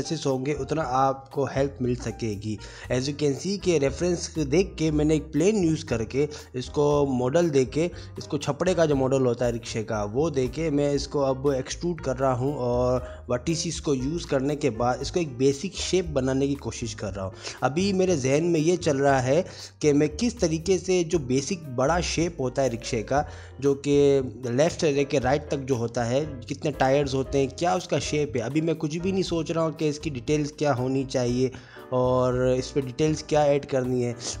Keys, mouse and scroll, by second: 0.3 click, 0.7 g, 1.4 click, 1.5 2, 1.6 click, 1.8 g, 2.3 middle click, 3.6 middle click, 3.8 2, 3.8 click, 4.0 ctrl+click, 4.1 middle click, 4.4 g, 6.1 middle click, 7.6 middle click, 8.1 1, 8.2 click, 8.4 shift+click, 8.5 s, 10.4 middle click, 10.8 click, 10.9 1, 11.0 shift+click, 11.1 middle click, 11.3 shift+click, 11.4 ctrl+z, 11.5 shift+click, 11.7 middle click, 11.8 g, 12.4 click, 12.5 middle click, 12.6 g, 13.0 middle click, 13.9 Tab, 14.1 shift+middle click, 14.9 click, 15.2 click, 15.3 g, 15.4 click, 15.7 click, 15.9 click, 16.3 click, 16.3 g, 17.5 click, 18.0 middle click, 18.1 click, 18.3 middle click, 18.5 click, 18.7 shift+a, 19.0 s, 19.5 g, 20.3 middle click, 20.6 s, 21.1 middle click, 21.9 click, 21.9 s, 22.1 g, 22.7 middle click, 23.0 click, 23.5 Tab, 23.8 Tab, 23.8 s, 24.0 g, 24.4 Tab, 24.4 middle click, 24.9 click, 25.1 ctrl+r, 25.8 3, 25.8 middle click, 26.0 click, 26.1 middle click, 26.1 g, 26.5 e, 26.9 middle click, 27.5 click, 29.3 middle click, 30.0 Tab, 30.1 middle click, 30.6 middle click, 30.8 click, 31.0 middle click, 31.2 click, 33.7 middle click, 34.0-34.4 scroll down 4, 34.3 shift+middle click, 34.3 scroll up 5.